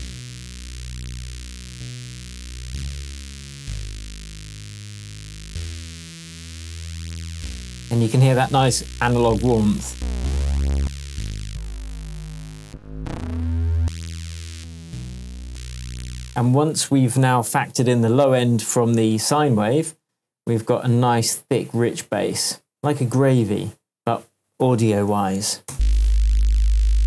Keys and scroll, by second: 16.1 space, 25.7 space.